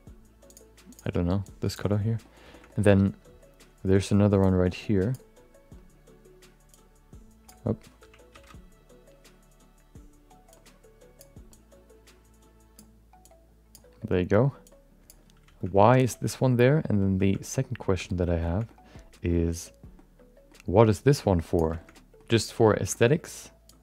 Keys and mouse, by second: 2.2 middle click, 2.5 shift+middle click, 2.6 middle click, 4.4 click, 6.7-7.7 drag, 10.2 ctrl+z, 10.5 click, 11.5-13.0 drag, 13.2 click, 14.6 click, 15.7 middle click, 16.2 middle click, 16.4 middle click, 17.4 middle click, 18.1 middle click, 18.6 middle click, 19.9 middle click, 20.9 click, 21.9 middle click, 22.9 shift+middle click, 23.1 middle click, 23.6 click.